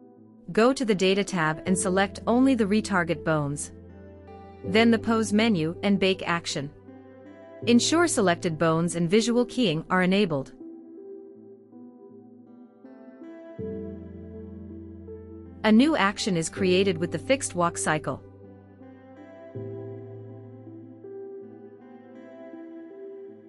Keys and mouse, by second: 1.3 right click, 3.7 click, 7.1-8.3 drag, 14.2 click, 15.8 space, 16.2 space, 17.8 space, 19.2 space, 20.1 click, 20.8 space, 23.3 space.